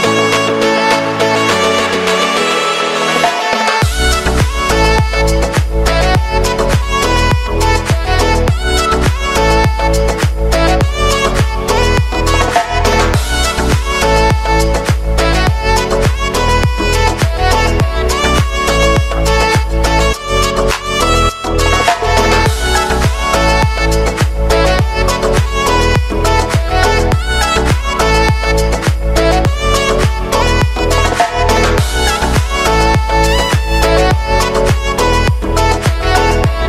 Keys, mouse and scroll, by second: 0.9-3.0 typing, 4.3-11.0 drag, 11.0 ctrl+x, 11.9 click, 13.3 ctrl+v, 13.7 click, 15.6 ctrl+d, 17.7 space, 19.8 ctrl+z, 22.1 ctrl+z, 24.7 click, 25.4 ctrl+z, 26.5 alt+click, 27.9 [, 29.0 Left, 29.2-30.2 typing, 30.3 Return, 31.3-32.6 typing, 33.0 Right, 34.0-35.5 typing, 36.3 Return.